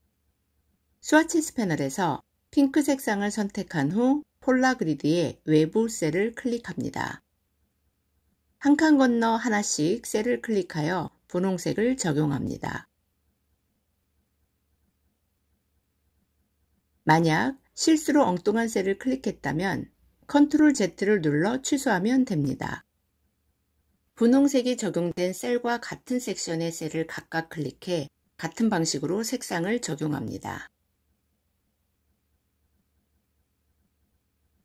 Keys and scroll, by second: 20.6 ctrl+z.